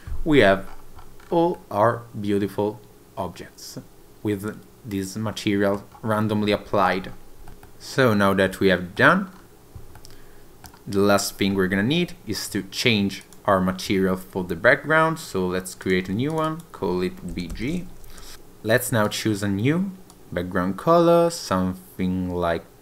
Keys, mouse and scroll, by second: 7.5 scroll down 3, 7.7 middle click, 9.3 scroll down 2, 10.0 middle click, 11.2-12.0 scroll up 3, 12.6-13.0 scroll down 1, 13.2 click, 15.9 click, 16.3 click, 16.5 click, 18.3 ctrl+z, 19.1 click.